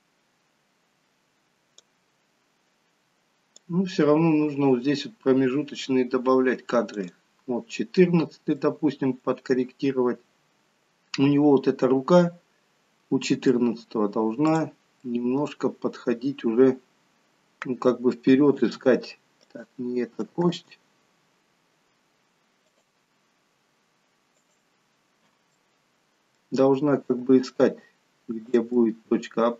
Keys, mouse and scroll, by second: 3.7 click, 7.3 click, 8.3-8.8 scroll up 2, 8.8 middle click, 10.6-11.2 scroll up 1, 11.2 middle click, 14.5 click, 15.1 middle click, 18.7 g, 20.9 ctrl+z, 22.8 click, 25.6 click, 25.6 middle click, 27.2 g, 28.8 middle click.